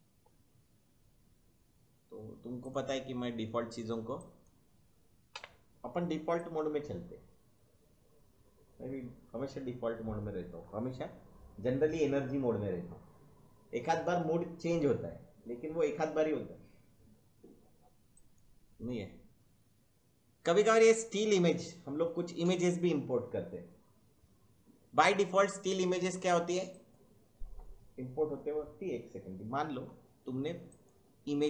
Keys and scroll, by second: 5.3 1.